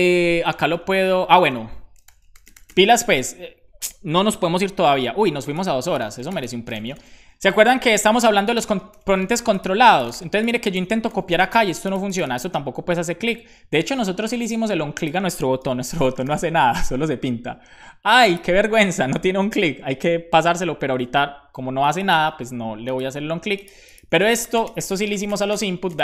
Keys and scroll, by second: 15.6 super+p, 15.7-16.8 typing.